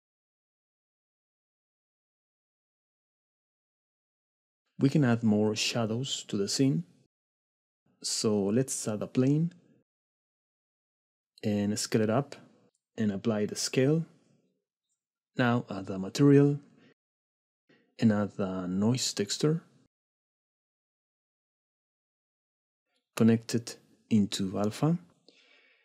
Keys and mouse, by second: 2.1 click, 7.0-7.4 shift+middle drag, 11.2-12.6 typing, 12.4 click, 13.8 ctrl+a, 15.3 middle click, 16.1 click, 17.7 shift+a, 22.3 click, 24.2-25.8 drag.